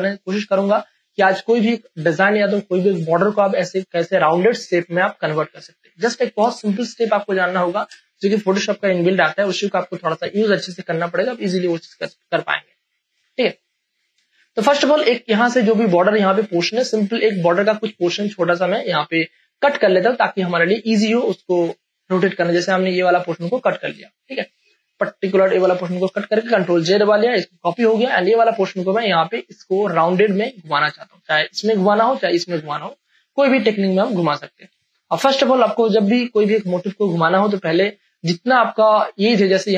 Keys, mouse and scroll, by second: 0.9 ctrl+e, 6.5 space, 6.8 ctrl+click, 11.1 click, 14.3 space, 14.5 ctrl+click, 14.9 v, 15.5 click, 16.7 space, 17.0 click, 17.3 space, 17.8 ctrl+click, 19.0 m, 21.5 click, 22.6 space, 22.8 ctrl+click, 23.4 v, 23.7 click, 24.0 space, 24.2 ctrl+click, 25.0 ctrl+j, 25.6 ctrl+space, 25.8 ctrl+click, 26.4 v, 26.8 click, 27.8 space, 28.0-30.5 ctrl+drag, 30.5 space, 30.6 click, 31.0 space, 33.1 space, 33.3 ctrl+click, 34.7 v, 35.7 space, 35.9 ctrl+click, 35.9 ctrl+click, 39.0 space, 39.2 click, 39.5 space.